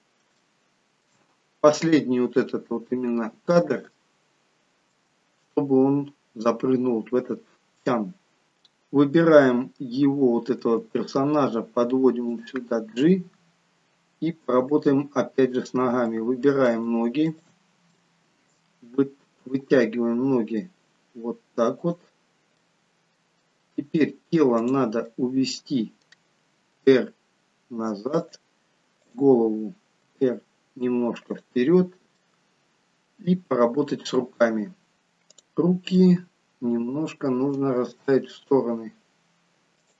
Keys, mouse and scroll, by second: 0.4 shift+middle click, 3.6-4.0 scroll down 1, 4.1 shift+middle click, 8.4-9.0 scroll down 2, 9.5-10.1 scroll down 1, 10.7 g, 13.0-13.8 scroll up 1, 13.8-14.5 scroll up 5, 15.7 click, 16.2 middle click, 17.4 shift+click, 18.1 middle click, 19.5 g, 22.8 middle click, 23.6 middle click, 24.7 click, 25.2 middle click, 26.9 r, 29.1 click, 30.1 r, 32.3 middle click, 35.6 click, 36.2 middle click, 38.1 g.